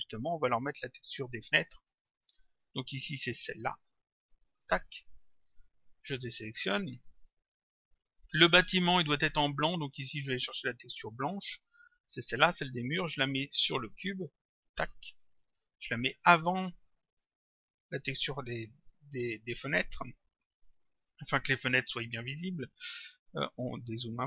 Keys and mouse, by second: 1.6 click, 6.2 click, 10.7 click, 12.1 click, 16.0 click, 20.6 click.